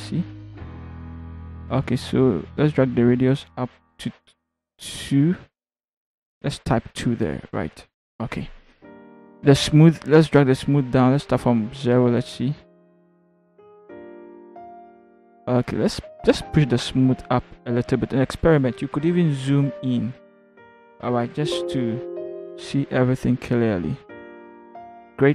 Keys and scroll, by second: 6.8 2, 19.6 ctrl+=, 20.2 ctrl+=.